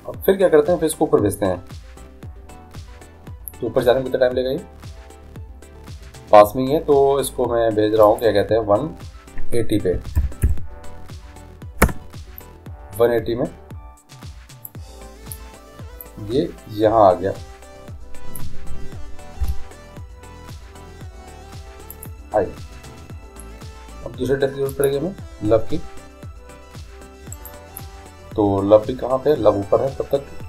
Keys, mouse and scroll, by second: 8.1-10.0 drag, 14.7-18.0 drag, 19.5 i, 24.8-26.6 drag, 27.4-29.2 right drag.